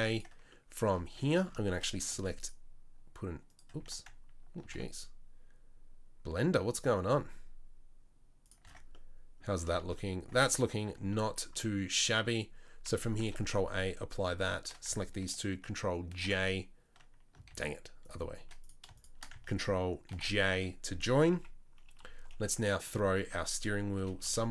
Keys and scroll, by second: 1.1 Tab, 2.1 ctrl+r, 4.6 ctrl+b, 8.6 Tab, 10.6 Tab, 10.9 Tab, 13.2 ctrl+a, 16.1 ctrl+j, 17.5 ctrl+z, 20.1 ctrl+j, 21.3 KP_9, 22.0 KP_3, 24.0 r.